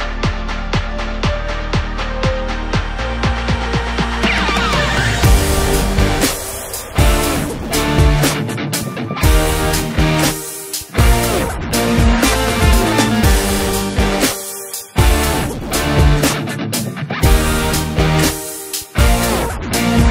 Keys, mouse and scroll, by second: 0.5 KP_Divide, 1.2-2.4 middle drag, 2.4 i, 5.2-5.8 scroll up 1, 5.8 ctrl+KP_Add, 6.1 x, 6.9 scroll down 3, 7.1-7.6 middle drag, 7.6 click, 7.9-9.0 scroll up 4, 9.0 i, 10.1 i, 11.4 i, 12.4 Tab, 12.8-13.5 scroll down 4, 13.5-15.6 right drag, 15.6 KP_Divide, 16.3 scroll down 3, 16.6-17.9 middle drag, 17.9-19.4 scroll up 4, 19.4 scroll down 1.